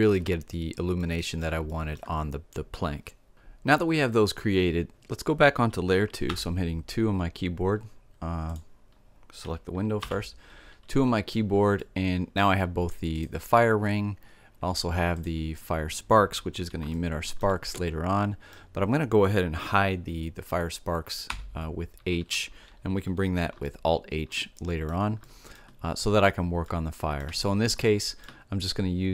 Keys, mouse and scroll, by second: 9.7 2, 10.6-12.9 middle drag, 12.9 right click, 13.3-14.8 drag, 14.9-16.8 drag, 16.8-19.4 middle drag, 21.0 h, 23.4 middle click, 25.9-27.7 drag, 27.6 middle click.